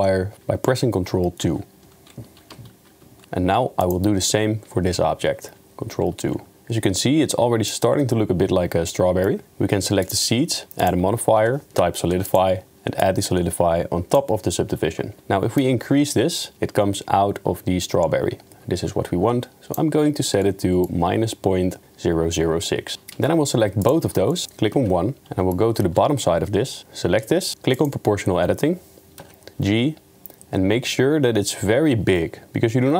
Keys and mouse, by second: 1.4 ctrl+2, 2.8 ctrl+2, 3.8 click, 5.9 ctrl+2, 6.5-7.7 middle drag, 9.0 middle click, 10.0 click, 10.9-12.4 drag, 13.0-14.3 drag, 15.6-19.8 shift+drag, 20.4 middle click, 22.7 middle click, 24.3 middle click, 24.8 KP_1, 25.2 Tab, 25.2-25.5 middle drag, 25.8 3, 27.8 click, 29.2 KP_1, 29.5 g.